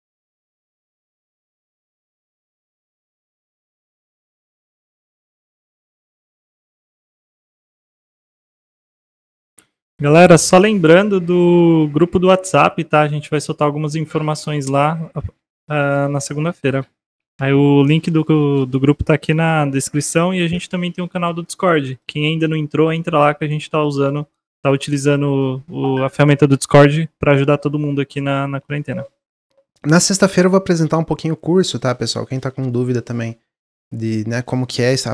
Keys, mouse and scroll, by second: 0.5 click, 0.8-3.9 middle drag, 6.6-7.3 middle drag, 7.3-7.7 scroll down 2, 7.8-11.6 middle drag, 11.6-15.2 drag, 15.2 shift+d, 17.2 ctrl+z, 21.4-22.9 middle drag, 22.9-24.1 drag, 24.1-28.5 middle drag.